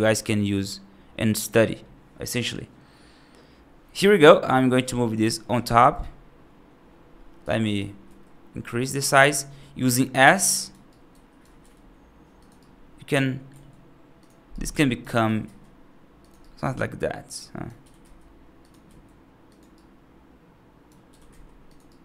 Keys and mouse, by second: 3.8 g, 5.9-7.6 right drag, 7.9 s, 9.3-9.7 middle drag, 10.0-10.6 right drag, 10.7-11.3 alt+right drag, 11.4 g, 12.4 right click, 13.4 s, 14.4 alt+right click, 15.1 g, 16.3-17.5 right drag, 17.7 g, 18.7 s, 19.6-20.7 right drag, 20.9 g, 21.7-22.0 right drag.